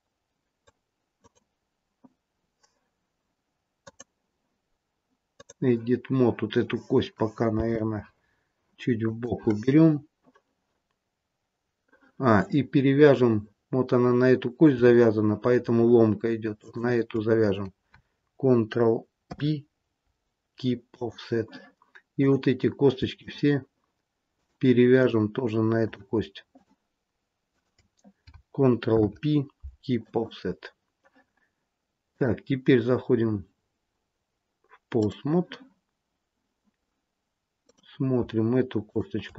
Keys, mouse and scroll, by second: 1.1 click, 3.7 click, 7.5 g, 16.5 shift+click, 19.3 ctrl+p, 22.1 click, 23.1 shift+click, 24.3 click, 25.8 shift+click, 26.5 shift+click, 28.9 ctrl+p, 32.0 click, 37.6 click, 38.8 shift+click.